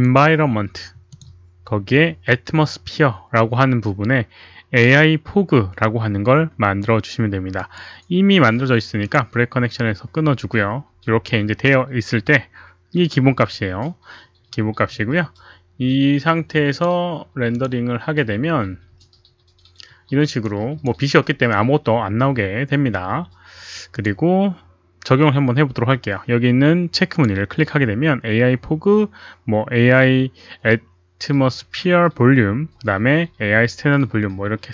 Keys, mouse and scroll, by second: 0.0 click, 1.1 click, 7.5 right click, 9.0 click, 16.7 click, 17.5 click, 20.6 click, 23.9 click, 27.1 click, 30.9 click.